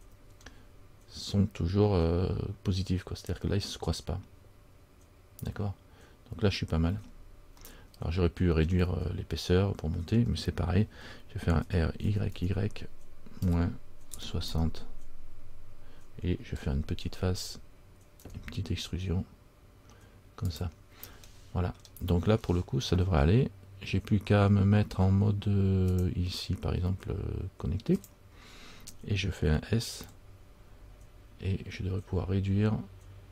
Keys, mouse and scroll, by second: 0.2-2.1 scroll up 3, 7.1-7.7 scroll down 2, 7.7 scroll down 2, 7.8 middle click, 18.3 e, 21.5 middle click, 21.9-23.4 scroll down 2, 24.8 scroll down 1.